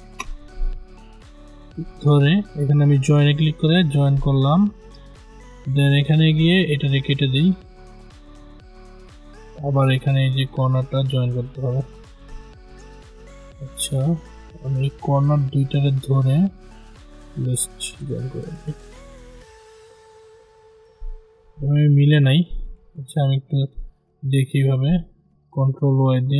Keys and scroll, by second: 12.9 ctrl+z, 21.6 ctrl+z, 26.1 ctrl+y.